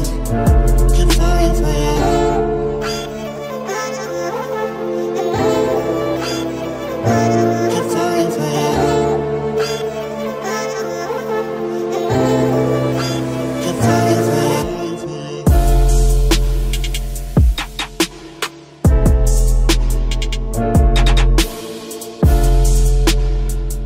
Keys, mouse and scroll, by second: 13.1-14.8 right drag, 14.1 middle click, 15.1 c, 17.1 right click, 18.1 KP_Decimal, 18.6 z, 19.0-21.1 middle drag, 19.9 i, 22.5-23.8 drag, 23.7 KP_3.